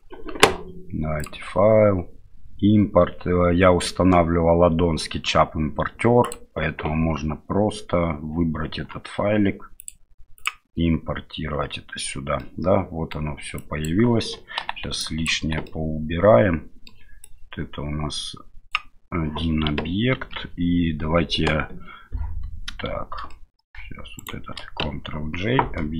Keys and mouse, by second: 1.2-6.4 drag, 12.4-13.1 middle drag, 13.7 click, 14.6 Delete, 15.0-15.3 drag, 15.4 Delete, 15.7-16.9 middle drag, 17.3-18.8 drag, 20.1 ctrl+j, 23.3-23.7 middle drag, 24.2 shift+right click.